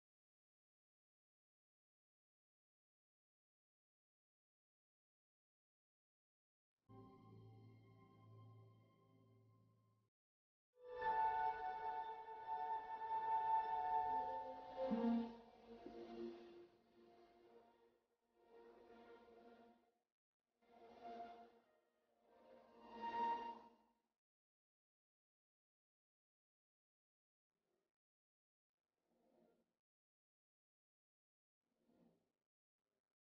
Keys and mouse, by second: 0.8 middle click, 1.2 Tab, 3.0 middle click, 3.7 Tab, 6.7 s, 11.9 s, 14.1-15.6 middle drag, 15.6-19.6 right drag, 18.5 s, 21.4-26.1 drag, 26.1 s, 31.4 right click, 31.4 s.